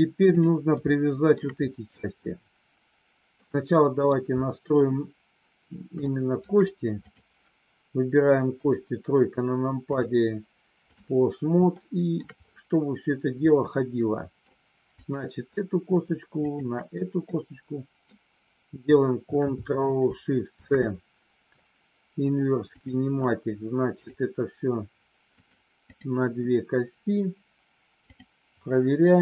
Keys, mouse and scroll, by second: 0.3 click, 0.8 shift+middle click, 3.3 middle click, 6.0 shift+middle click, 8.4 KP_3, 9.8-10.9 drag, 11.8 shift+middle click, 13.4-14.4 middle drag, 16.4 shift+click, 17.3 middle click, 20.5 ctrl+shift+c, 24.0 click, 25.4 click, 28.0 click.